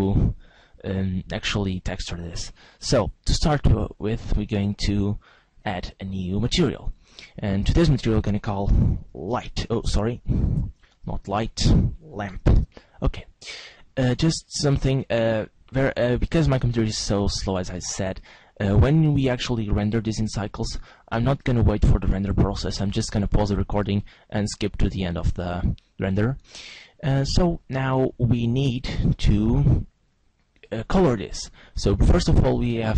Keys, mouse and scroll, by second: 4.4 click, 5.6 click.